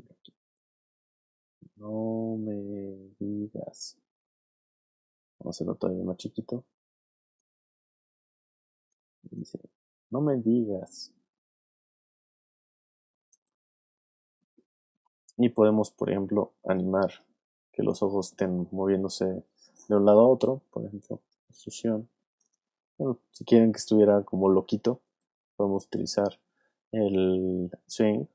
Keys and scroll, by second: 3.9 space, 9.2 space, 13.3 space, 16.3 alt+space, 17.0 space, 22.8 super+z.